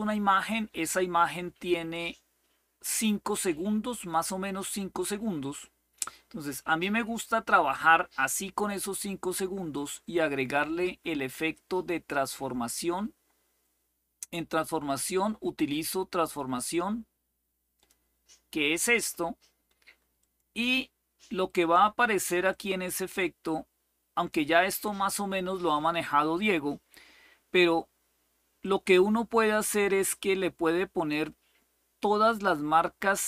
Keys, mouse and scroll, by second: 0.0 click, 1.6-5.7 drag, 9.4 click, 10.7-11.9 scroll down 1, 11.9-12.9 scroll down 1, 12.9-14.1 scroll down 1, 14.1-15.9 scroll down 1, 15.9-17.6 drag, 19.9 click, 22.2-24.1 drag, 28.3-30.8 drag.